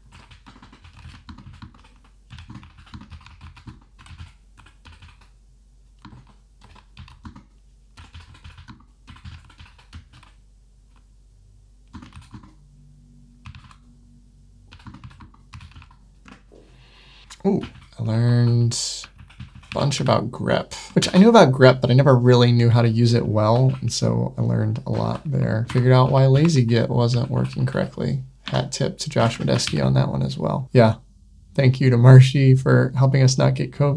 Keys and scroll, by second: 10.0 Right, 17.6 Up, 18.0 super+1, 20.8 Tab, 20.9 super+9, 26.3 super+1, 28.3 Tab, 29.1 Escape, 29.6 super+9.